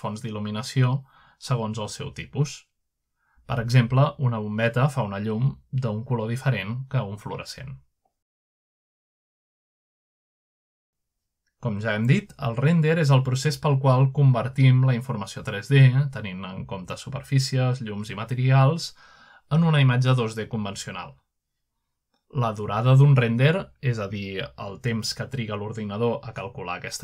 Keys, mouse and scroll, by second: 0.1 click, 1.7 click, 2.8-7.3 drag, 9.1-10.2 shift+middle drag, 10.4-12.7 middle drag, 12.7-13.7 scroll down 1, 15.8 click, 16.8-17.6 scroll down 1, 18.3 click, 19.2 shift+middle drag, 19.7-20.3 middle drag, 20.8-21.5 middle drag, 21.1-21.9 scroll up 2, 22.4 click, 22.9 click, 23.8-24.4 middle drag, 24.5 middle click, 25.1 scroll down 1, 26.3 click.